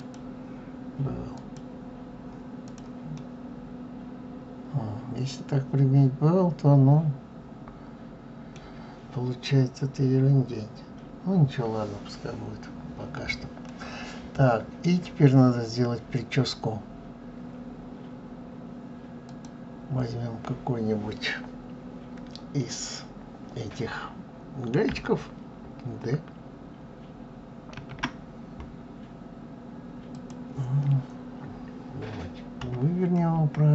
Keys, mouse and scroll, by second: 2.9-5.9 middle drag, 11.3-12.4 scroll down 4, 12.4-13.4 scroll up 1, 13.4-15.1 middle drag, 15.1-15.5 scroll up 2, 19.0 click, 32.3 KP_3.